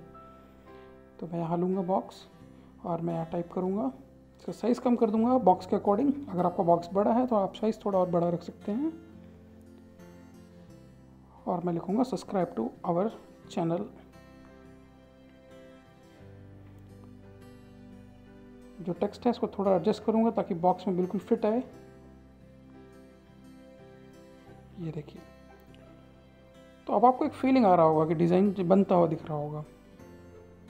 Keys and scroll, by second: 2.4 ctrl+a, 5.7-15.9 typing, 18.7 ctrl+e, 27.3 ctrl+c, 27.7 ctrl+v.